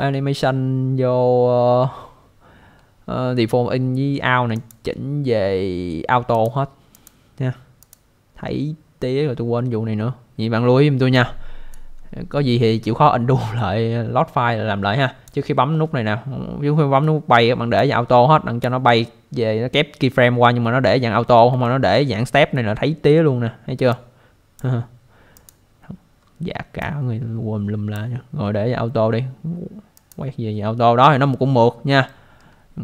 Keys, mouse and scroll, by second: 4.5 click, 6.3 click, 6.9 click, 7.8 click, 11.7 click, 17.8 click, 19.0 scroll up 1, 21.6 alt+middle click, 22.4-22.9 scroll down 1, 23.9 click, 25.3 click, 26.2 scroll down 1, 26.8 click, 29.9 click, 30.6-31.2 scroll up 1, 32.1 alt+middle click.